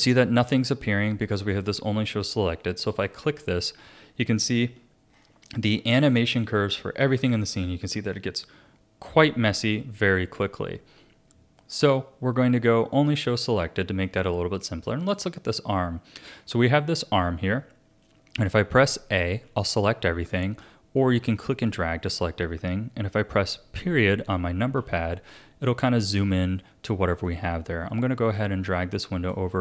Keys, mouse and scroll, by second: 2.9 click, 4.1-5.1 scroll down 13, 5.1-6.1 scroll up 7, 6.2-9.3 shift+middle drag, 11.7 click, 12.9 click, 15.0 click, 16.4-19.4 scroll up 3, 19.4 a, 20.3 a, 21.0 click, 24.8 KP_Decimal, 27.3-29.6 drag.